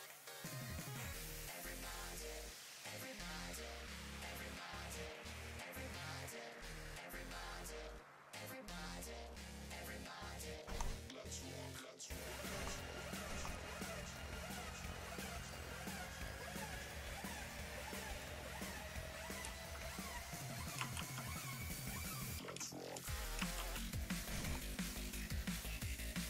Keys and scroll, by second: 4.4 s.